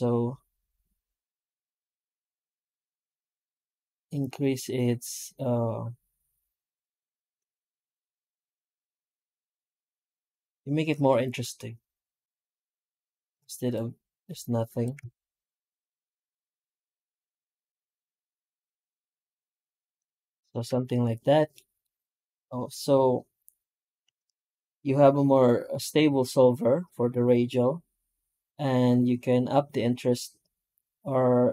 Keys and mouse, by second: 20.2 middle drag, 20.6 middle click, 20.7 middle drag, 20.8 middle click, 21.0 middle click, 21.1 middle drag, 21.4 middle click, 23.9 F9.